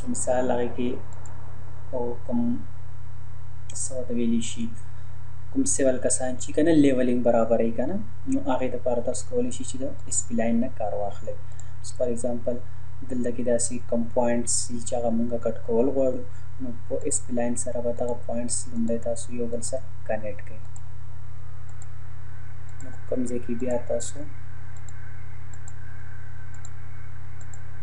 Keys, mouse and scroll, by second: 1.1 click, 10.0 click, 17.0 click.